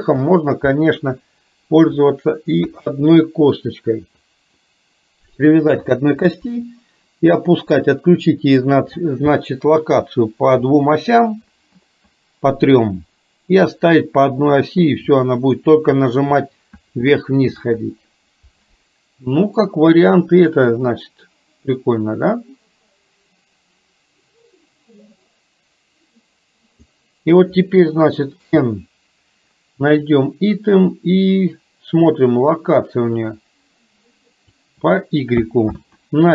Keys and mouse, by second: 0.0 ctrl+z, 1.1 KP_1, 19.8-27.0 drag, 28.5 n, 33.5-34.6 drag, 35.8 ctrl+z.